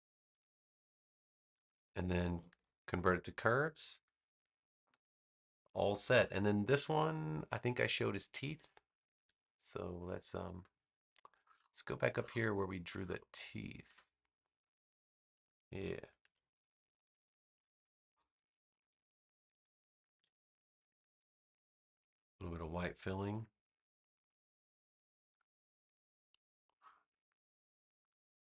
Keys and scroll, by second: 2.4 super+Return, 11.1 space, 16.1 super+c, 16.6 space, 20.0 super+v, 23.2 v.